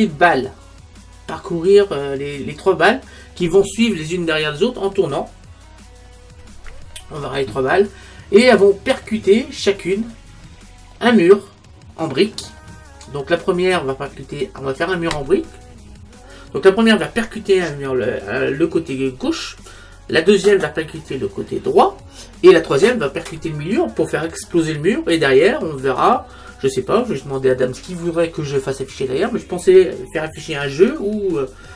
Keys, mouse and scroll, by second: 7.0-7.7 scroll up 1, 7.7-12.8 middle drag, 7.7-8.3 scroll up 1, 8.3-9.4 scroll up 1, 12.9-13.7 scroll down 1, 13.7-15.4 middle drag.